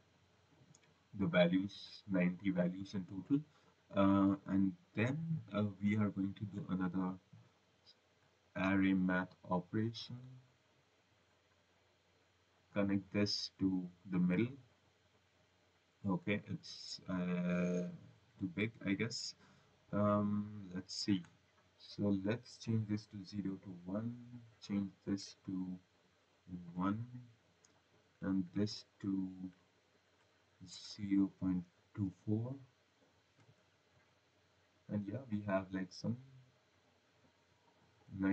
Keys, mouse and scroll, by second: 0.3 click, 0.7 click, 7.2 click, 9.1 ctrl+c, 10.0 v, 10.4 click, 12.7 click, 15.2 click, 21.7 click, 23.1 click, 24.6 click, 25.5 click, 29.1 click, 29.9 click, 31.6 2, 31.9 4, 33.9 click, 36.4 click, 36.8 click, 37.2 click.